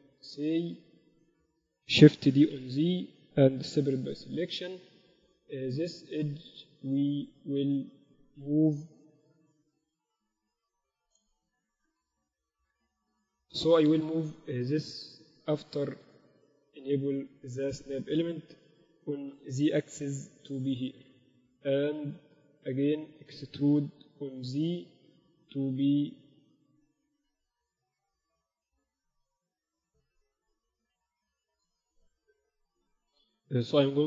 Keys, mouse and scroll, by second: 0.1-2.4 middle drag, 2.4 shift+d, 3.9 p, 4.8 Tab, 5.2 right click, 5.7 Tab, 9.1 KP_1, 9.3 z, 12.7-16.0 middle drag, 16.0 shift+Tab, 16.5-18.2 drag, 18.8 g, 24.3 e, 32.3 shift+b.